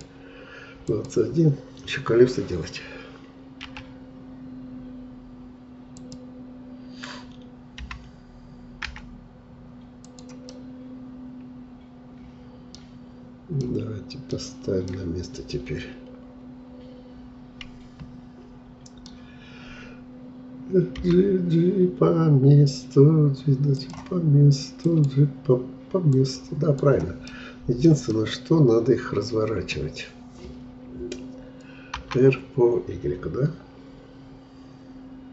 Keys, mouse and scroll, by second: 3.7 s, 7.8 g, 10.5-13.5 middle drag, 13.6-17.9 middle drag, 21.0 g, 27.3-31.1 middle drag, 32.0 r.